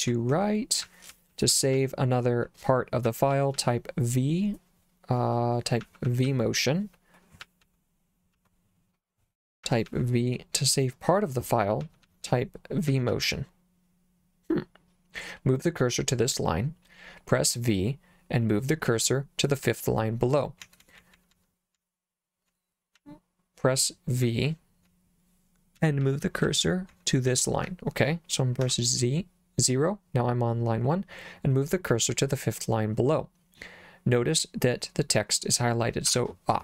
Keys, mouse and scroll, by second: 0.0-3.5 typing, 5.8 j, 6.1 j, 6.3 j, 7.4 j, 7.6 j, 8.4 j, 9.7 j, 9.9 j, 11.8-13.1 typing, 19.7-21.8 typing, 23.0 j, 24.3 k, 25.6-28.7 typing, 36.1 v.